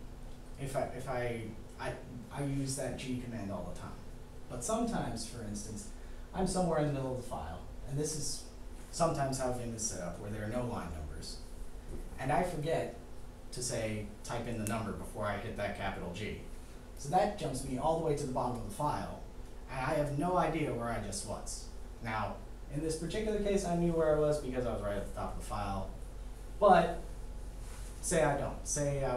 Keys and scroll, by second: 5.7 6, 7.5 Down, 16.9 shift+g.